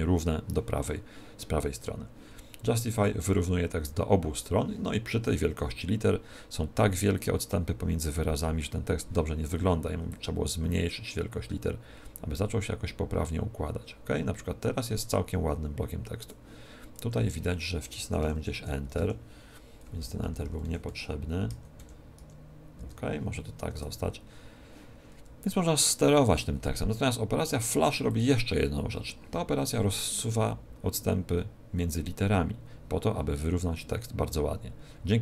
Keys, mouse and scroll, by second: 2.9 click, 10.0 click, 17.0 Tab, 17.9 Up, 18.1 Up, 18.4 Up, 18.8 space, 18.9 Delete, 19.9 Left, 20.1 Left, 20.4 Left, 20.5 Right, 20.8 Right, 21.4 Left, 21.7 Right, 22.2 Delete, 22.8 space, 28.0 click.